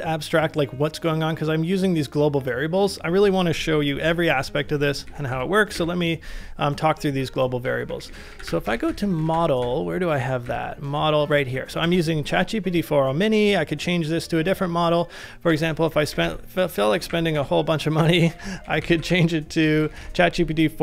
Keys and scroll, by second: 4.0 shift+8, 5.1 shift+3, 5.3 shift+3, 5.7 shift+3, 7.4-12.3 typing, 15.2-19.9 typing, 19.8 ctrl+c.